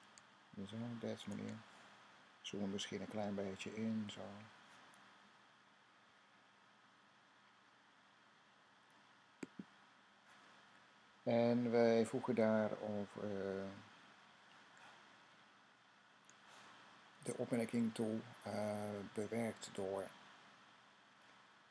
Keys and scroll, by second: 0.5-1.3 typing.